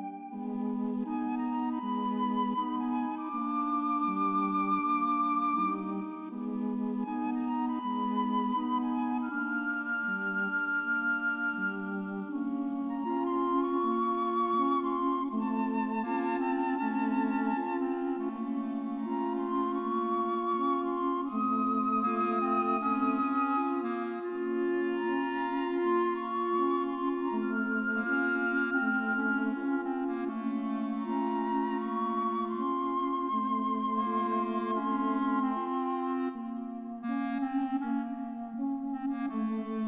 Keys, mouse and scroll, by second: 0.0 right click, 4.3 right click, 4.8 right click, 5.3 right click, 6.0 right click, 6.2 right click, 6.6 right click, 6.9 right click, 8.2 right click, 9.1 right click, 9.4 right click, 9.7 right click, 12.2 right click, 12.4 right click, 19.3 right click, 20.1 right click, 20.6 right click, 21.4 right click, 28.1 right click, 29.6 right click.